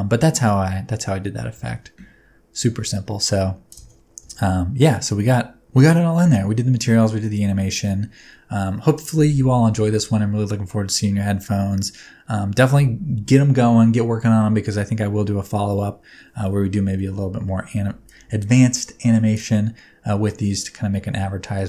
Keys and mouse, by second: 1.6 space, 17.1 space, 17.7 space, 19.5-21.6 drag.